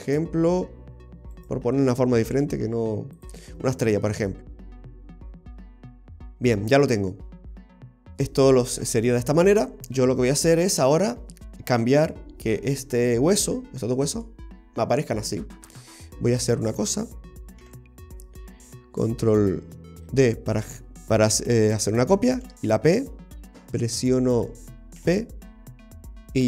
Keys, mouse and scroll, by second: 1.4 right click, 2.3 g, 3.6-3.9 scroll down 1, 3.9 middle click, 5.2 scroll down 1, 5.5 middle click, 7.3-8.2 scroll down 1, 11.2-14.3 scroll up 5, 16.3-17.7 scroll down 2, 16.5 middle click, 17.7 a, 20.0 shift+d, 22.4 ctrl+p, 25.0 p.